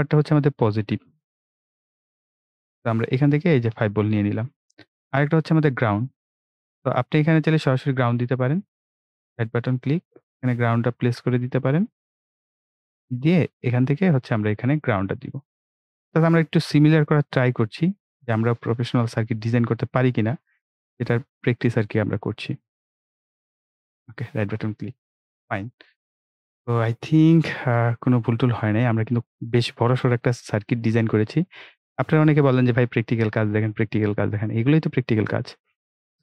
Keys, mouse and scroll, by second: 0.5 click, 3.9 click, 8.8 right click, 9.7 click, 12.1 click, 12.8 right click, 15.4 click, 23.9 right click, 25.0 click, 25.8-26.2 ctrl+scroll down 1, 26.9 right click, 27.8-29.1 ctrl+scroll up 1, 35.5 ctrl+Num_Lock, 35.5-36.0 ctrl+scroll up 1, 36.0 ctrl+s.